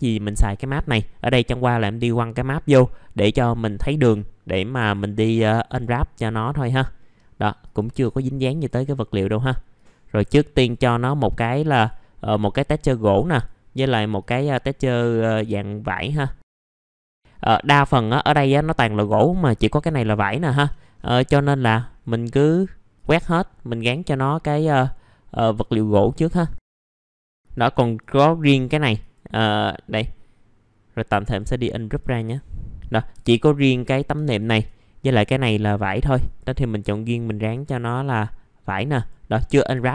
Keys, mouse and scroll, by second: 5.6 click, 6.3 middle click, 7.6 click, 8.1 ctrl+shift+click, 9.7 click, 11.3 click, 12.3 click, 13.1 click, 15.4 click, 17.1 click, 17.1 middle click, 17.3-17.7 scroll down 1, 17.7 click, 18.3-20.4 scroll up 1, 20.4 middle click, 20.6-21.0 scroll down 1, 21.3 middle click, 21.8-22.3 scroll up 1, 22.3 middle click, 22.9 click, 26.7 scroll up 1, 26.8 middle click, 31.2 click, 33.1 F4, 34.2-35.3 ctrl+drag, 35.3 middle click, 36.2 click, 39.4 scroll down 1, 39.7 F4.